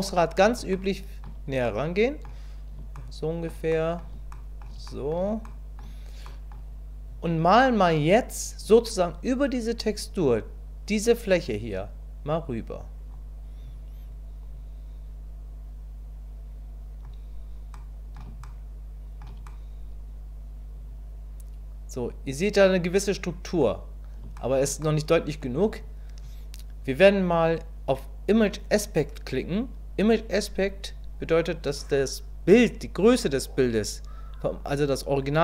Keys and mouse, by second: 0.8 shift+middle click, 1.6 middle click, 3.0 shift+middle click, 3.7 middle click, 4.3 shift+middle click, 4.9 middle click, 5.5 shift+middle click, 6.3 click, 12.2 click, 14.5-17.0 drag, 17.7 middle click, 18.4 shift+middle click, 19.5-23.6 middle drag, 24.3 shift+middle click, 24.8 middle click.